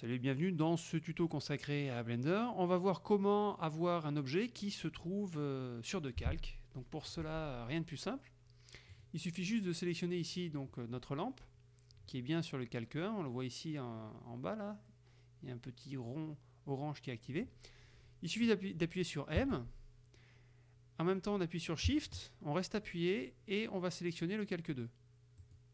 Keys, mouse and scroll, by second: 9.0 right click, 19.4 m, 25.5 shift+click.